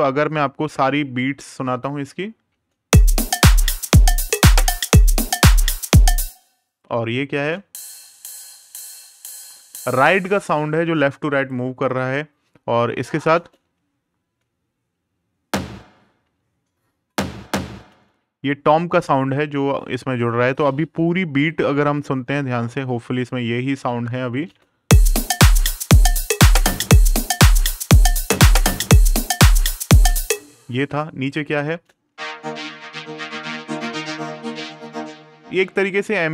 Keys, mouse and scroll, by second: 2.2 space, 5.6 space, 6.4 right click, 7.1 space, 9.8 click, 12.8 right click, 13.1 space, 17.6 space, 20.3 click, 24.2 space, 29.7 space, 31.0 right click, 31.5 space.